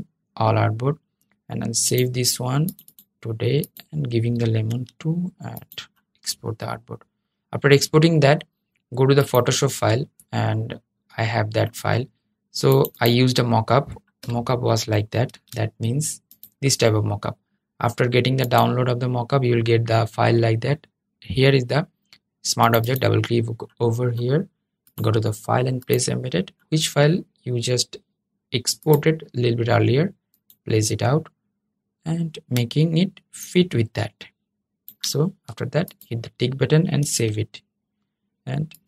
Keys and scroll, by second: 15.0 super+s, 36.8 super+s.